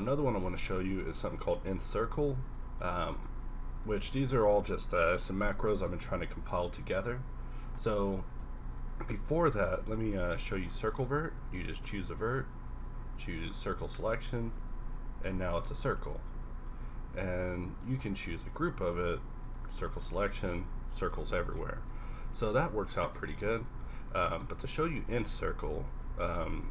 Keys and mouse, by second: 0.0 KP_1, 3.9 w, 5.5 q, 8.0 ctrl+Tab, 8.6 ctrl+r, 9.9 ctrl+z, 10.3 ctrl+Tab, 11.4 w, 12.1 q, 14.0 middle click, 14.8 KP_Decimal, 15.4 Tab, 16.3 Tab, 16.9 ctrl+z, 17.1 ctrl+z, 18.2 w, 18.9 q, 19.6 q, 19.9 middle click, 20.7 Tab, 21.7 Tab, 22.3 ctrl+z, 23.3 KP_1, 23.4 KP_1, 25.1 ctrl+KP_Add, 25.5 ctrl+KP_Add, 25.6 ctrl+KP_Add, 26.1 ctrl+z.